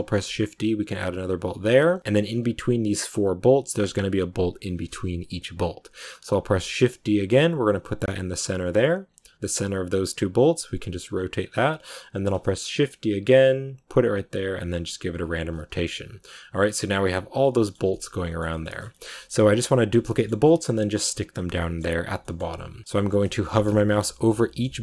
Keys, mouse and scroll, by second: 1.7 r, 6.2 shift+d, 10.3 r, 12.0 shift+d, 14.4 r, 15.4-17.9 middle drag, 17.9 scroll down 1, 18.0-24.8 middle drag.